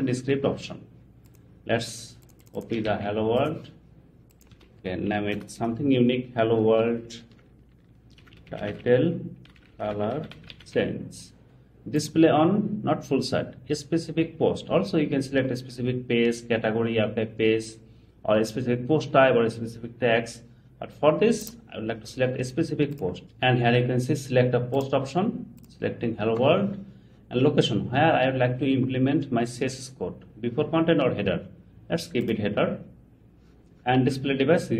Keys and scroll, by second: 2.9 super+c, 4.5 super+v.